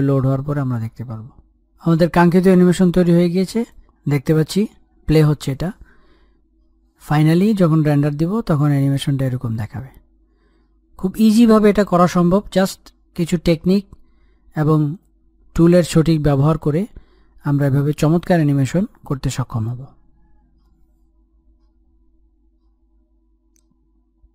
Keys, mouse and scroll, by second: 5.4 click.